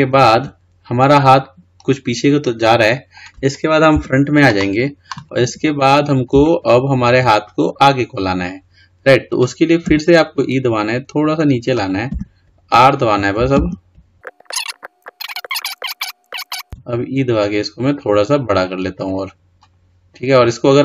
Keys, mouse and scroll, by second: 0.0 scroll down 1, 0.2-3.2 middle drag, 4.1 KP_1, 5.5-6.0 scroll down 4, 6.0-6.6 scroll up 1, 6.6-9.7 shift+middle drag, 10.0 e.